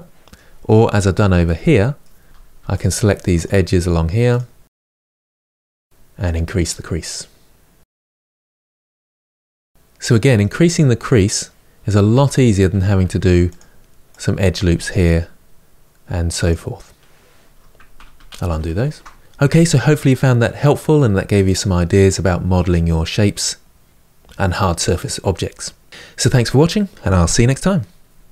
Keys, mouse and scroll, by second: 2.3 alt+Left, 2.7 alt+shift+click, 2.9 alt+shift+click, 3.0 middle click, 3.3 alt+shift+click, 3.5 alt+shift+click, 3.8 middle click, 4.0 alt+click, 4.3 ctrl+z, 5.1 shift+click, 5.3 ctrl+click, 6.2-8.7 drag, 8.7 Tab, 9.1-9.4 scroll down 1, 9.4-10.5 middle drag, 10.5-11.8 scroll up 1, 11.8 Tab, 12.9 ctrl+r, 14.4 ctrl+r, 17.9 ctrl+z, 18.2 ctrl+z, 19.2 Tab.